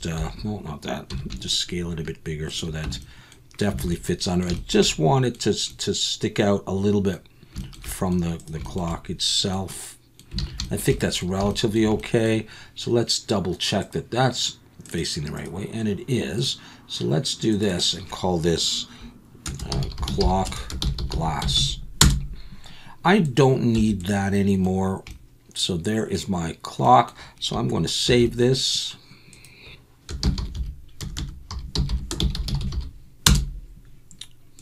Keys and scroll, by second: 0.1 Escape, 1.1 s, 2.8 Tab, 3.8 alt+a, 10.4 alt+a, 21.6 s, 23.7 x, 28.1 ctrl+s.